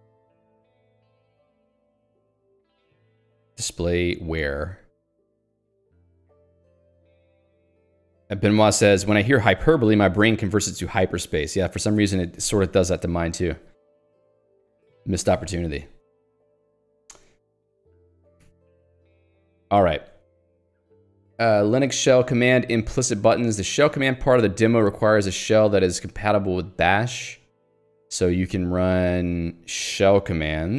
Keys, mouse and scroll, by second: 1.5-3.9 typing, 13.7 j, 14.6 k, 15.3 q, 15.8 Escape, 16.2 j, 17.8 ctrl+d, 21.0 k, 22.6 l, 24.4 j, 25.3 h, 27.5 j.